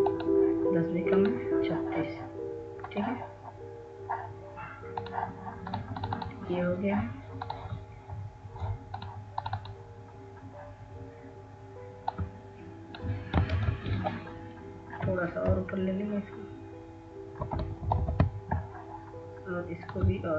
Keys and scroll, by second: 14.5 ctrl+z, 16.8-18.2 Up, 18.6 Up.